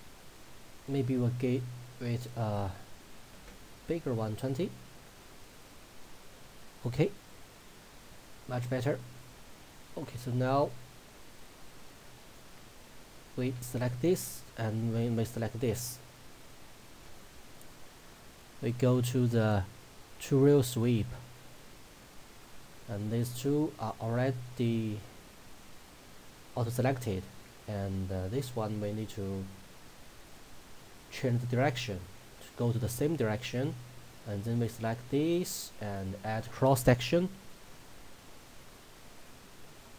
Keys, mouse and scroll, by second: 14.4 shift+click, 30.3 click, 34.6 click, 36.9 click.